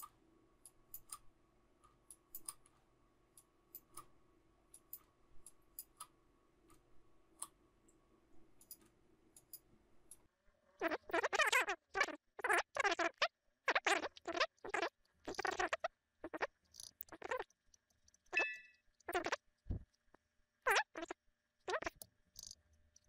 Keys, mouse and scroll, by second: 0.6 shift+click, 2.0 shift+click, 3.3 shift+click, 5.4 shift+click, 9.3 shift+click, 10.0 shift+click, 10.3 shift+click, 12.8 ctrl+click, 14.6 alt+scroll up 1, 14.8-15.5 typing, 15.9 shift+click, 18.1 shift+click, 18.3 alt+z, 18.4 alt+click, 18.5 alt+scroll down 1, 18.9 alt+scroll up 1, 20.9 ctrl+click.